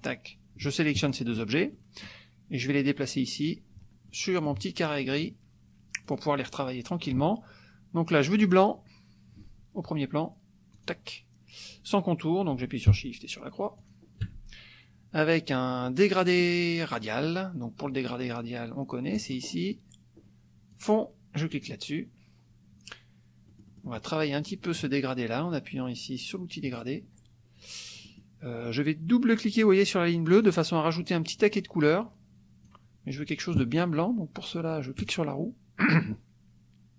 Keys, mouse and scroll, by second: 1.1 shift+click, 1.7 shift+click, 2.7 click, 4.1 click, 5.2 click, 6.1 click, 8.4 click, 10.8 click, 13.8 shift+click, 19.1 click, 20.7 click, 21.5 click, 23.5-24.9 drag, 26.7 click, 28.0 middle click, 30.4 click, 31.4-32.8 drag, 35.0 click.